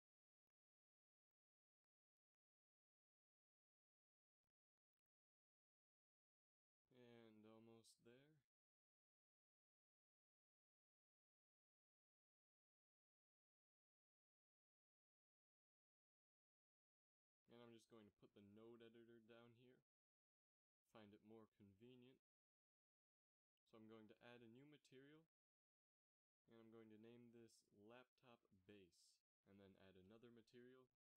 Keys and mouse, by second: 1.0 c, 4.1 c, 6.9 c, 9.3 c, 15.9 click, 22.2 middle click, 25.6-31.1 drag.